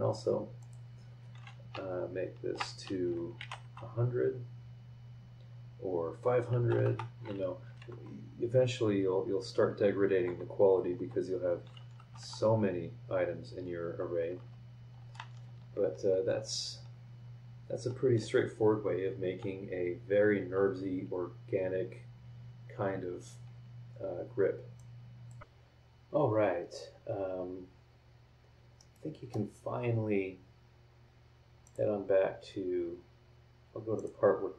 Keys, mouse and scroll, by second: 0.6 click, 1.7 BackSpace, 3.4 KP_1, 3.5 KP_0, 6.6 BackSpace, 7.6 KP_5, 7.8 KP_0, 10.9 KP_0, 12.0 BackSpace, 13.9 BackSpace, 24.7 click, 28.8 middle click, 28.9 click, 28.9 right click, 31.6 click, 33.9 click.